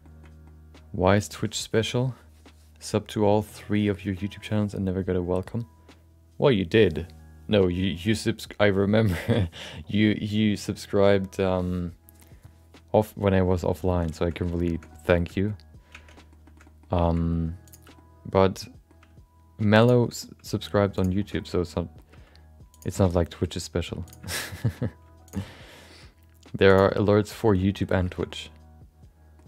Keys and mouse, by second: 0.0 shift+middle click, 0.4 middle click, 13.9 middle click, 14.2 shift+middle click, 14.3 middle click, 14.7 shift+middle click, 14.9 middle click, 15.1 shift+middle click, 15.3 middle click, 15.9 Tab, 16.1 middle click, 16.4 shift+middle click, 16.7 middle click, 17.0 middle click, 17.2 middle click, 17.6 click, 17.9 middle click, 19.0 g, 20.0 shift+middle click, 20.2 middle click, 20.9 click, 21.2 middle click, 21.3 middle click, 22.1 g, 22.9 middle click, 23.1 middle click, 23.5 middle click, 24.0 click, 24.2 shift+middle click, 24.4 middle click, 25.3 shift+click, 25.5 middle click, 26.0 g, 26.9 middle click, 27.1 middle click, 27.4 middle click, 27.6 middle click, 28.1 shift+middle click, 28.2-29.4 middle drag.